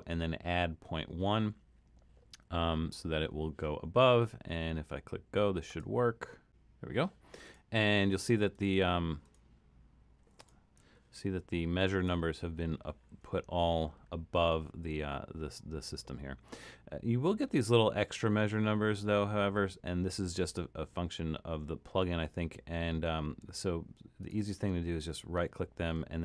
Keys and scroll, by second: 10.9 super+=, 11.3 super+=.